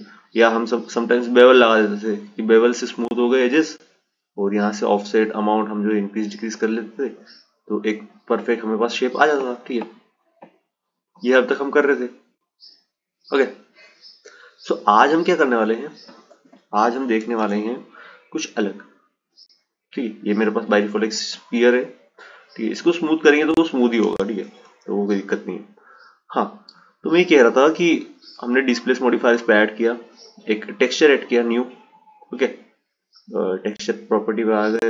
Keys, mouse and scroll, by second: 1.6 click, 4.5-7.5 drag, 8.3 click, 9.5-12.1 right drag, 12.1 click, 15.5 Delete, 16.4 shift+a, 21.3-23.4 right drag, 23.4 ctrl+z, 27.7-28.7 drag, 29.5-33.6 drag.